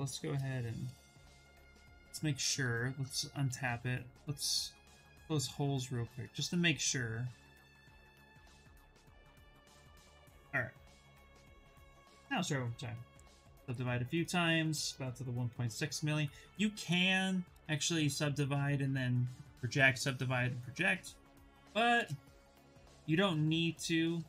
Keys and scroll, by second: 1.5 2, 3.3 2, 8.0 2, 11.8 shift+f, 13.0 ctrl+d, 14.4 shift+f, 16.4 ctrl+z, 17.2 ctrl+z, 21.2 shift+f, 22.4 ctrl+d, 23.2 shift+f.